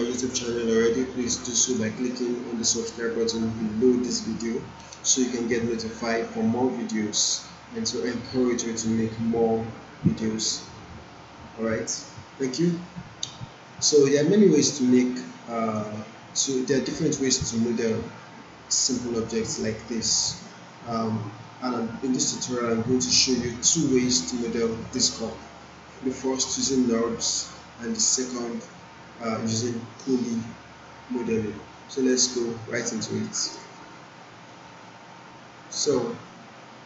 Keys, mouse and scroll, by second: 33.6 click, 33.7 click, 35.9-36.8 drag.